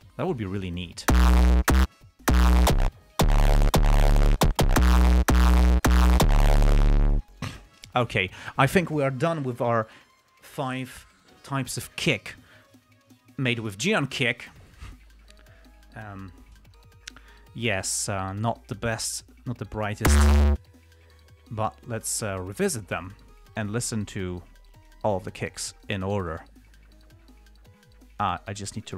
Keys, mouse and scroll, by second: 22.0 click, 23.3 click, 24.1 ctrl+scroll down 2, 25.1 click, 25.8 click, 28.1 click, 28.8 click.